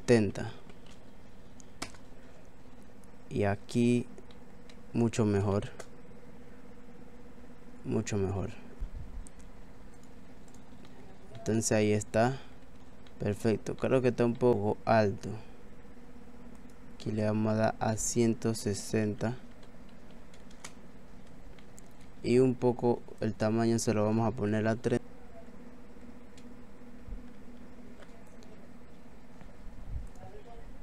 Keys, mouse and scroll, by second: 3.6 scroll down 1, 3.7 middle click, 4.3 middle click, 5.6 shift+a, 8.8 click, 8.8 scroll up 3, 11.1 middle click, 11.1 scroll down 1, 11.4 middle click, 11.7 scroll down 1, 11.9 middle click, 12.7 scroll down 1, 13.1 middle click, 13.8 middle click, 14.4 middle click, 14.5 middle click, 14.5 scroll down 1, 16.6 click, 21.4 scroll down 1, 21.6 middle click, 23.2 click.